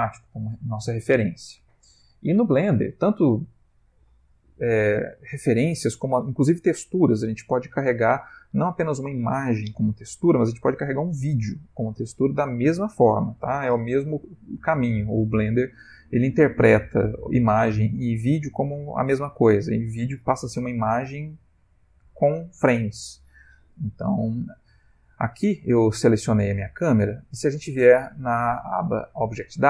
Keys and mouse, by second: 28.0 click.